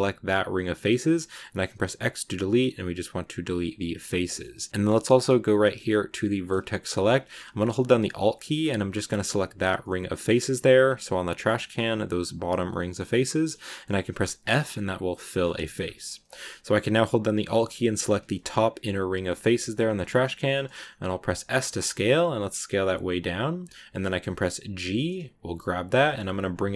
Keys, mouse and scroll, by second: 0.4 middle click, 1.0 x, 4.1 middle click, 4.7-6.2 scroll up 2, 6.3 click, 8.5 alt+right click, 9.5-10.7 middle drag, 10.7-11.3 scroll down 2, 11.3-13.2 middle drag, 13.2 scroll up 1, 13.2 middle click, 14.2 f, 14.5 scroll down 2, 15.3 middle click, 15.6-17.9 scroll up 2, 17.9 alt+right click, 19.1 middle click, 19.7-20.4 scroll down 2, 20.4 shift+middle click, 21.0 s, 23.9 middle click, 24.6 g.